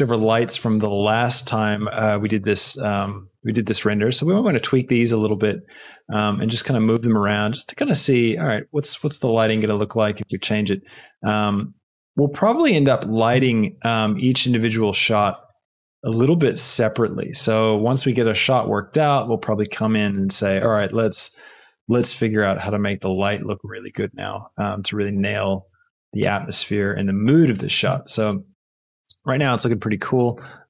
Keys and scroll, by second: 4.5 z, 12.8 Escape, 15.2 r, 15.4 z.